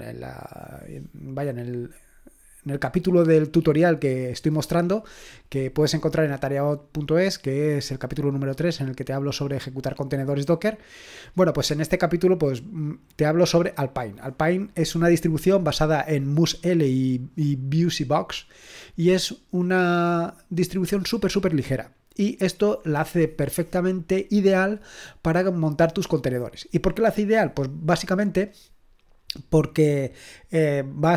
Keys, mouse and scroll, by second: 5.9-6.4 scroll down 1, 6.4-9.3 scroll up 1, 10.1-13.3 scroll down 1, 13.3-17.0 scroll down 1, 17.0-22.3 scroll down 1, 22.3-31.1 scroll down 1.